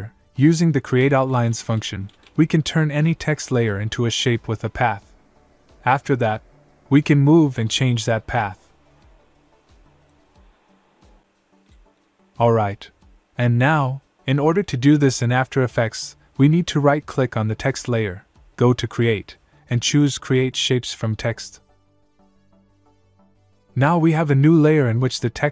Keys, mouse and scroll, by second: 0.7-2.7 typing, 3.7 click, 5.3 right click, 7.2 click, 8.4 click, 12.1 click, 15.8 click, 18.8 right click, 23.6 click.